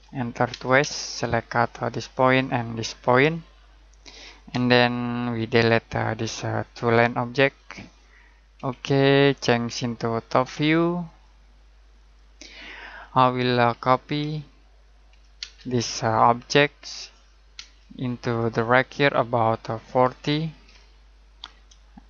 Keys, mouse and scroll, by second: 0.0-0.5 typing, 2.2 click, 4.5 space, 5.3 click, 8.5 Delete, 11.0 click, 12.8-13.2 scroll down 1, 13.2 middle click, 13.7-14.2 typing, 15.3 space, 16.1 click, 17.5 space, 18.3 click, 20.0-20.6 typing.